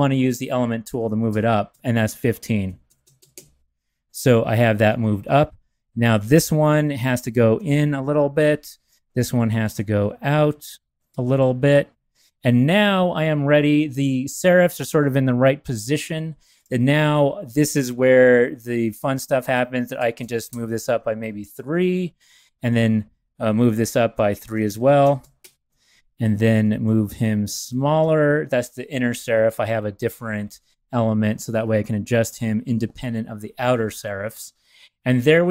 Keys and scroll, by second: 2.6 shift+Up, 3.2 Up, 3.3 Up, 6.9 shift+Left, 7.5 Left, 9.6 shift+Right, 11.1 Right, 11.4 Right, 16.0 a, 27.4 shift+Left, 27.5 shift+Left.